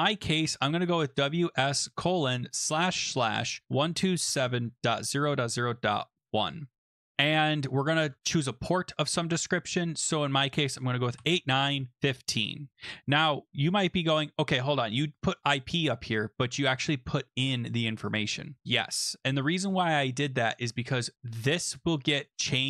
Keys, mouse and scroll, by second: 0.0-8.5 typing, 10.9-12.7 typing, 12.7 Right, 15.2 click, 15.3 click, 18.0 click, 20.9 click, 22.2 click.